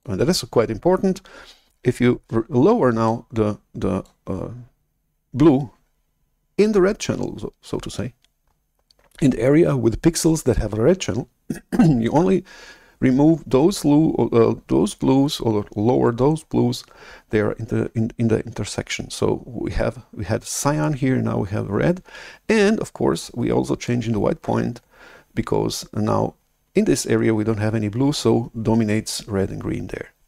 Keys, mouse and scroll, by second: 0.1-2.4 drag, 3.0 click.